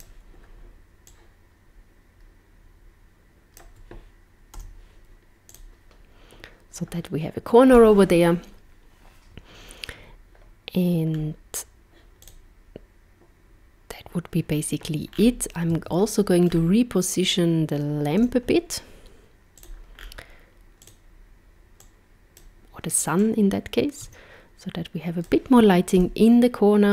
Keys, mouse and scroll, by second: 0.1 click, 1.1 click, 4.6 z, 11.2 scroll down 1, 12.2 click, 15.2 scroll down 4, 16.1 middle click, 16.5 scroll down 3, 18.2 z, 19.9-20.8 scroll down 3, 20.8 click, 21.8 click, 23.2 click, 25.9 KP_0.